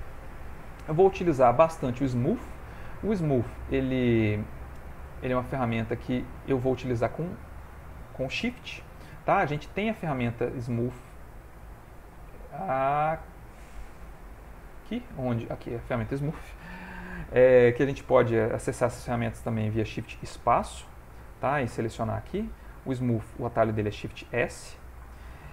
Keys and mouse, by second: 20.1 shift+space, 20.6 shift+space, 24.4 shift+space.